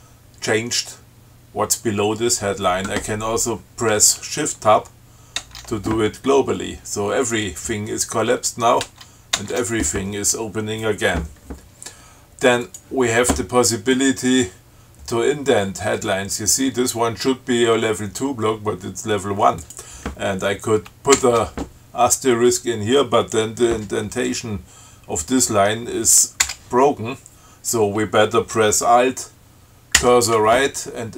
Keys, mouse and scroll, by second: 5.6 shift+Tab, 9.0 shift+Tab, 12.9 click, 19.8 click, 26.6 BackSpace, 30.2 alt+Right.